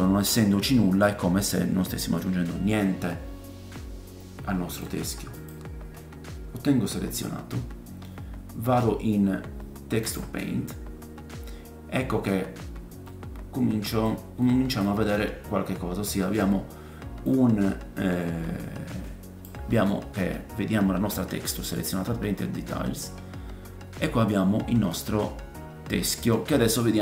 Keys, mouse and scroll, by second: 0.4-5.4 middle drag, 5.4-11.7 drag, 11.5 scroll down 2, 11.7-12.7 right drag, 12.2-12.6 scroll down 3, 12.7 click, 12.9 right click, 13.0 middle click, 13.3-15.0 drag, 14.4 middle click, 15.0 right click, 15.2-15.5 scroll down 2, 15.3 click, 15.4 right click, 15.6 middle click, 15.8-24.4 drag, 15.8 scroll up 1, 17.2-24.4 middle drag, 17.2-24.4 right drag, 23.1-25.0 scroll up 7, 25.0 middle click.